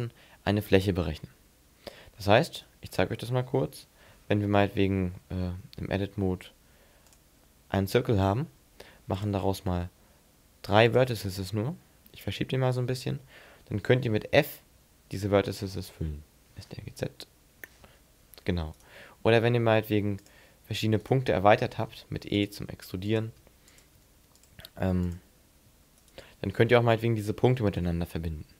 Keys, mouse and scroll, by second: 0.6-1.0 scroll up 3, 2.1-2.5 scroll down 6, 2.5 Tab, 2.9-3.7 scroll down 2, 3.7 z, 4.1-4.7 scroll down 3, 5.1-5.4 scroll up 4, 5.5 Tab, 6.1 shift+a, 9.1 click, 12.2 click, 13.2 shift+middle click, 13.7 middle click, 14.4-14.7 scroll up 2, 14.7 f, 15.8 f, 16.7 ctrl+z, 17.8 ctrl+z, 18.9 right click, 20.2 click, 21.0 right click, 22.0 e, 22.5 click, 22.6 e, 23.2 click, 23.4 e, 23.9 click, 24.5 click, 24.6 e, 25.2 click, 26.0 shift+right click, 27.9 f.